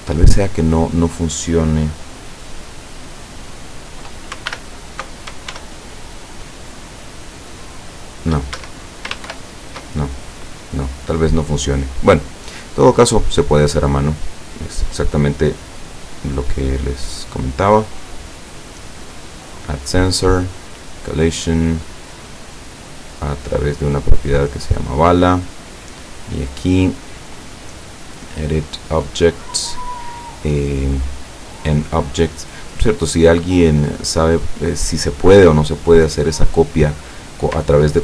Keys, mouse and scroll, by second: 4.5 alt+l, 5.5 shift+l, 8.6 shift+Escape, 9.3 ctrl+shift+;, 11.1 right click, 12.2 right click, 13.6-14.2 drag, 15.4-16.5 drag, 16.9-18.1 scroll up 1, 18.1-19.1 drag, 19.4 click, 20.7 click, 22.4 click, 23.1 click, 24.3 click, 25.3-26.1 drag, 26.4 click, 29.5 click, 30.8 click, 31.7 click, 32.5-33.3 drag, 34.7-36.2 drag.